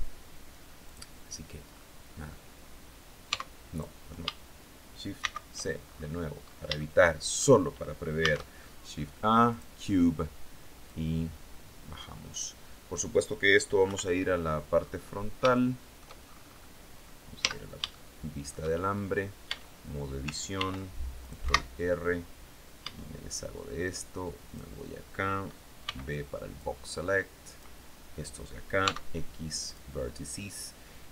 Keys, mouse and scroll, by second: 0.3 click, 1.1-1.4 scroll down 2, 2.7 x, 3.2 click, 4.6 shift+c, 5.3-6.1 shift+scroll up 5, 6.2 shift+middle click, 7.6 shift+a, 8.9 click, 10.3-12.0 drag, 13.3 KP_1, 14.2-14.8 scroll down 2, 15.0 shift+middle click, 16.0 scroll up 2, 16.8 z, 17.4 shift+middle click, 18.1-18.7 shift+scroll up 1, 18.9 Tab, 20.0 ctrl+r, 20.7 click, 20.9 Escape, 22.2 a, 23.9 click, 25.3 b, 26.0-27.2 drag, 28.2 x, 29.1 click.